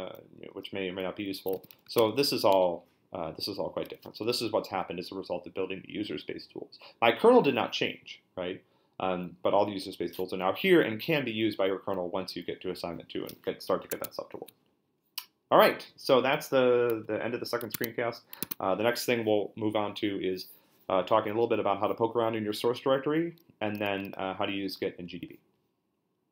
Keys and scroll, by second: 1.5-2.7 typing, 13.9 super+Tab, 17.7 Tab, 18.4 super+Tab.